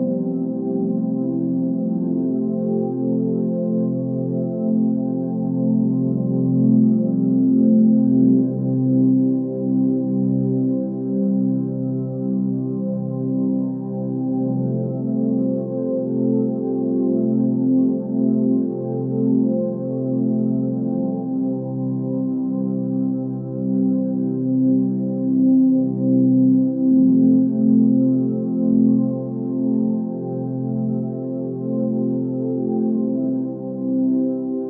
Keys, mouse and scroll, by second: 9.6 click, 11.2 click, 19.4 ctrl+z, 31.2 click, 31.9 ctrl+space.